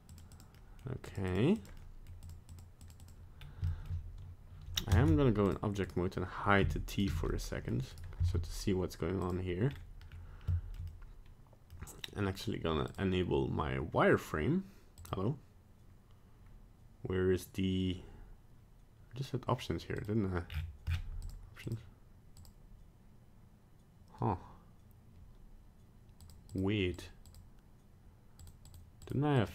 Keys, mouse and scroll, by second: 0.1 click, 0.3 click, 0.5 middle click, 1.1 click, 1.3 click, 1.6 click, 1.8 middle click, 2.2 click, 2.5 click, 2.8 click, 3.0 click, 3.3 scroll up 1, 3.7 shift+middle click, 5.0 ctrl+Tab, 5.8 right click, 6.6 h, 6.9 right click, 7.1 h, 7.3 middle click, 7.9 right click, 8.3 ctrl+Tab, 9.7 scroll up 2, 10.1 scroll down 1, 10.5 shift+middle click, 10.8 middle click, 12.8 click, 19.9 click, 20.5-21.7 scroll down 16, 21.2 click, 22.3 click, 26.2 click, 26.5 click, 26.9 click, 27.2 click, 28.7 click, 29.0 click, 29.4 click.